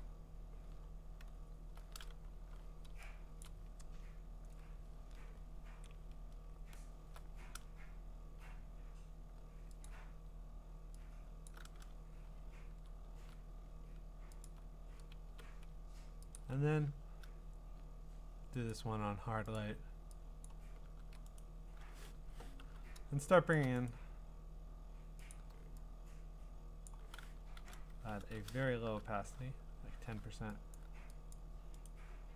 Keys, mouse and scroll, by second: 0.8-1.6 scroll, 3.4 click, 5.0-5.9 scroll, 5.9-6.4 scroll down 13, 6.6 scroll up 7, 9.8 click, 10.1 scroll, 11.5 alt+click, 13.1 ctrl+z, 14.4 alt+click, 15.3 b, 16.3 alt+click, 18.7 click, 19.5 click, 20.5 click, 21.0 ctrl+z, 21.4 right click, 22.1 Escape, 22.6 u, 23.5 click, 23.9 right click, 25.3 click, 26.9 click, 28.2 ctrl+z, 28.6 shift+1, 30.8 click, 31.3 click, 31.8 right click.